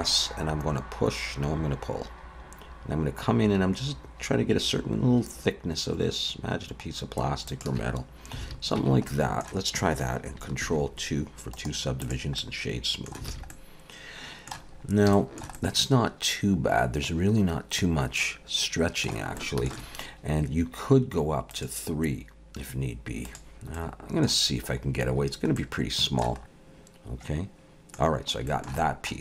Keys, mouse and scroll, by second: 8.4 alt+a, 8.8 Tab, 9.1 middle click, 10.6 ctrl+2, 12.4 middle click, 13.3 alt+a, 13.5 middle click, 14.7-15.1 scroll up 2, 15.1 shift+middle click, 15.5 middle click, 19.4 shift+middle click, 21.5 click, 23.2 click, 23.8 middle click, 24.5-26.0 scroll down 6, 25.6 middle click, 26.4 Tab, 26.4 alt+a, 26.4 middle click, 26.4-27.0 scroll down 1, 28.1-28.5 scroll down 3, 28.5 shift+middle click, 28.8 middle click.